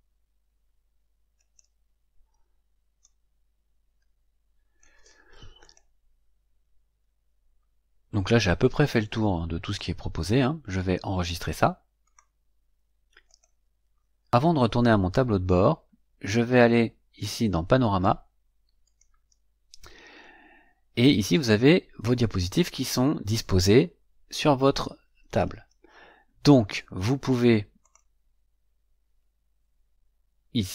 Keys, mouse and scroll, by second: 1.3 click, 2.9-4.9 drag, 5.5 click, 10.8-11.2 scroll up 1, 11.9 click, 13.2 click, 18.8 click, 27.8 click.